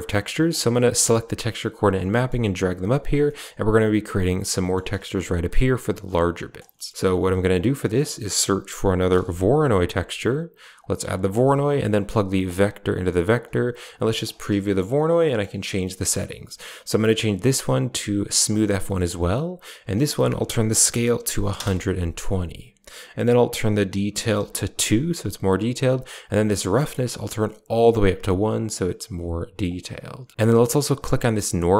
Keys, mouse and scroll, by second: 0.4 click, 2.0 middle click, 2.2 g, 3.1 middle click, 4.5 middle click, 6.6 middle drag, 7.0 shift+a, 12.3-13.3 drag, 14.1 ctrl+shift+click, 15.7 middle click, 16.8-18.5 drag, 18.7 middle drag, 19.8-21.4 drag, 23.5-24.5 drag, 27.0 click, 29.5-30.3 drag, 31.1 click.